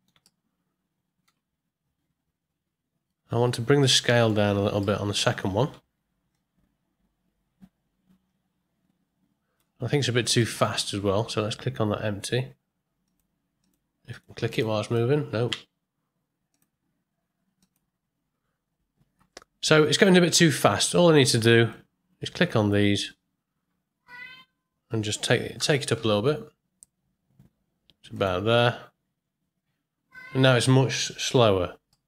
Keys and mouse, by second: 0.2-1.2 ctrl+middle drag, 4.1 middle click, 4.8 middle click, 6.3-9.6 shift+drag, 10.4 ctrl+middle click, 13.0 click, 14.1 click, 14.8 click, 15.5 space, 17.6 click, 21.7-22.7 drag, 25.5 g, 29.0 space, 30.4 middle click, 31.9-32.0 middle drag.